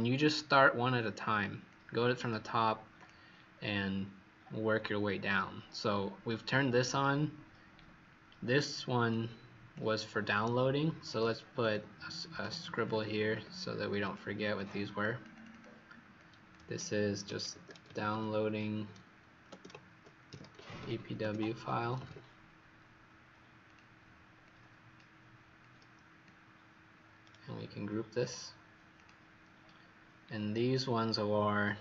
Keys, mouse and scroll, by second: 0.9-1.7 scroll down 4, 1.7 click, 3.5-4.8 scroll down 1, 5.0-6.0 scroll up 3, 6.0-7.8 scroll up 1, 7.8-8.4 scroll down 1, 8.4 scroll up 1, 9.0 click, 12.4 click, 12.4-13.3 typing, 14.0 click, 14.5 click, 15.3 click, 15.5 click, 16.1 click, 16.9-18.8 typing, 20.0-22.4 typing, 23.6 click, 30.3-31.5 scroll down 2, 31.5-31.8 scroll up 1.